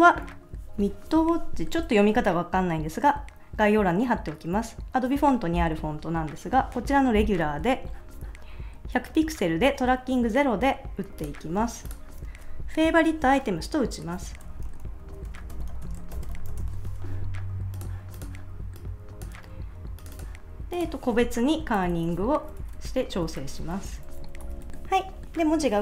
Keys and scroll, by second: 14.1-17.1 typing, 21.8 alt+Right, 22.4 Right, 23.2 Right, 23.4 alt+Left, 23.9 Left.